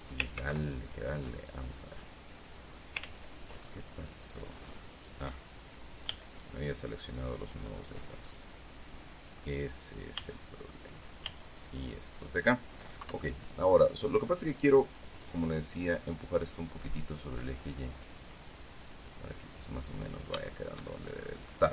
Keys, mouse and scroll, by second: 1.0 ctrl+z, 3.5 ctrl+click, 3.6 ctrl+z, 4.3-5.6 ctrl+middle drag, 6.7 b, 7.3 click, 8.6-10.1 middle drag, 10.7 b, 10.9 click, 11.8 b, 11.9 click, 13.6 KP_3, 21.0 shift+middle click.